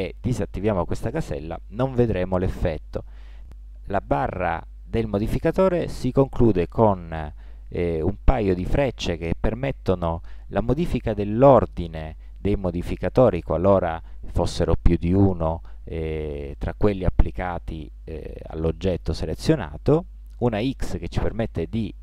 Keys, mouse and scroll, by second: 0.2-2.0 drag, 3.0 click.